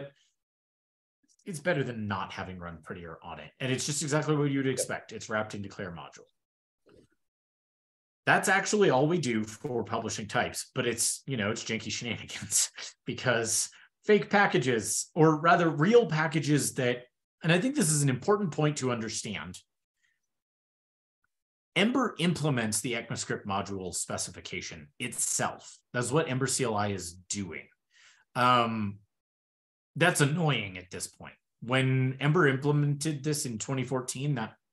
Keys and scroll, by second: 11.6 shift+super+[.